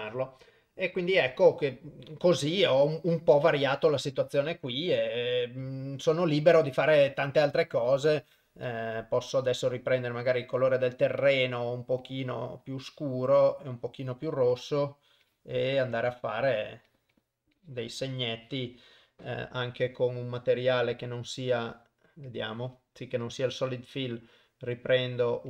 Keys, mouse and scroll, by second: 5.9 shift+right click, 8.8 click, 11.3 click, 14.6 click, 14.7 click, 15.4 click, 15.6 click, 15.9 click, 16.1 click, 16.6 click, 17.0 click, 17.2 click, 17.7 click, 18.5 click, 18.7 click, 21.0 click, 22.4 click, 23.3 click, 24.1-25.4 drag.